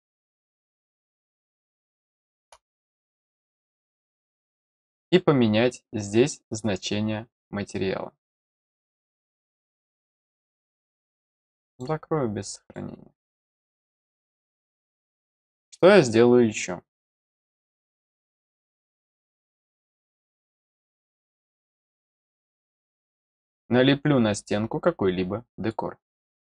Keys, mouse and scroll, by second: 0.6-0.9 scroll down 2, 1.2-2.4 middle drag, 3.4 click, 6.4 click, 11.6 click, 12.6 click, 14.8 middle click, 21.3 click, 22.2 click, 23.4-25.7 drag.